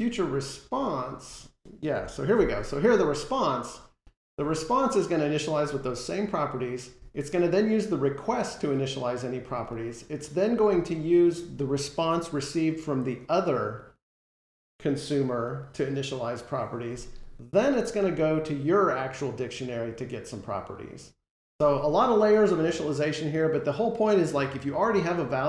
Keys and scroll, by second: 1.8 F12.